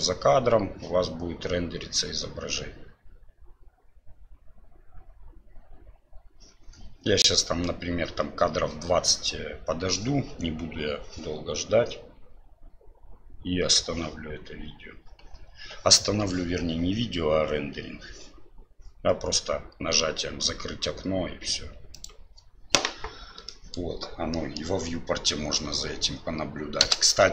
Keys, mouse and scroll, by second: 23.5 middle drag, 24.4 middle click, 25.4 space.